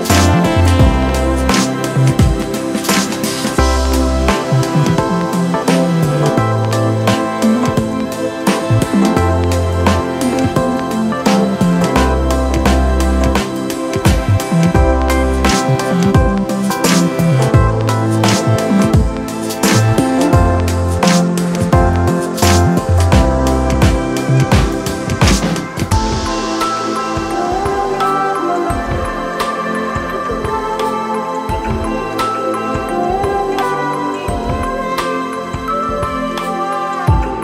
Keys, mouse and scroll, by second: 10.5 ctrl+z, 11.2 x, 27.1 ctrl+click, 34.9 ].